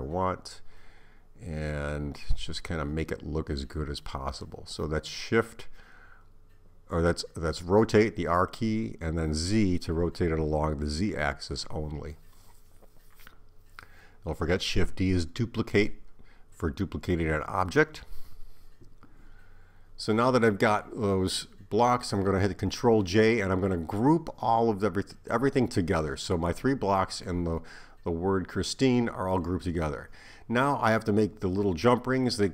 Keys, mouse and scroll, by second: 4.1 shift+d, 6.1 click, 9.0 r, 18.5 shift+click, 19.6 shift+click, 20.4 shift+click, 22.2 ctrl+j, 24.0 shift+a, 29.3 click.